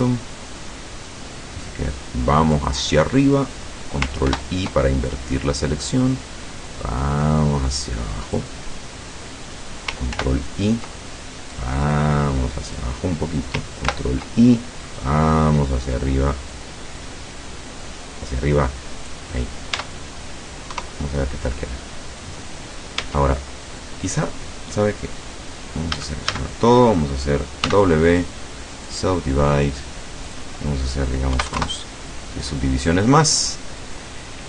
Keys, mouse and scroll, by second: 4.3 ctrl+i, 5.9-8.6 drag, 10.1 ctrl+i, 11.6-13.0 drag, 13.9 ctrl+i, 15.0-19.4 drag, 19.8 Tab, 20.7 KP_0, 23.0 Tab, 26.0 a, 27.7 w, 29.0 click, 30.3 click, 31.4 KP_1, 31.6 KP_Enter, 33.2-33.7 scroll down 2, 34.0-34.3 scroll up 2.